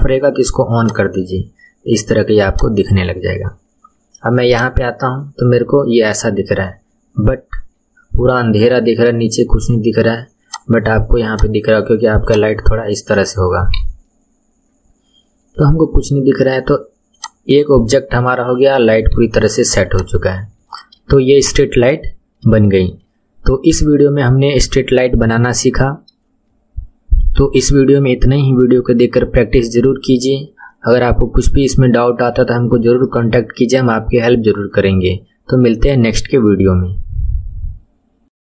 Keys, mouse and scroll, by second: 0.8 click, 2.5 click, 3.1-4.4 scroll up 3, 4.5 click, 5.5-6.1 scroll down 3, 6.2 scroll down 7, 6.5-9.5 middle drag, 10.5 click, 11.3 click, 13.6 KP_1, 14.1-17.1 middle drag, 17.1 click, 18.9 KP_1, 19.9 click, 20.7-21.6 shift+middle drag, 21.8-22.6 scroll down 7, 22.6-24.1 shift+middle drag, 24.1-24.7 scroll down 2, 24.7-27.8 middle drag, 30.6-31.4 scroll up 6, 31.8-37.0 shift+middle drag.